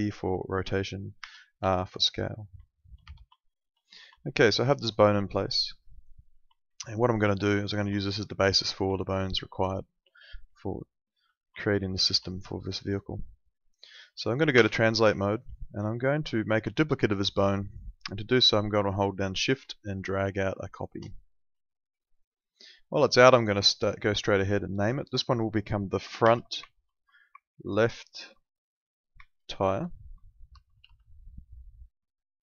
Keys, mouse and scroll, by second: 0.0 alt+middle click, 1.2 r, 1.7 alt+middle click, 2.6 alt+middle click, 3.0 e, 3.4 alt+middle click, 4.2 alt+middle click, 5.0 alt+middle click, 7.0 middle click, 7.8 alt+middle click, 8.0 alt+middle click, 8.9 alt+middle click, 10.5 alt+middle click, 11.6 alt+middle click, 14.6 w, 15.5 middle click, 15.8 alt+middle click, 16.7 alt+middle click, 19.8 shift+click, 22.1 click, 26.2 shift+f, 26.8 shift+-, 27.6 shift+l, 28.1 shift+-, 29.6-31.3 typing.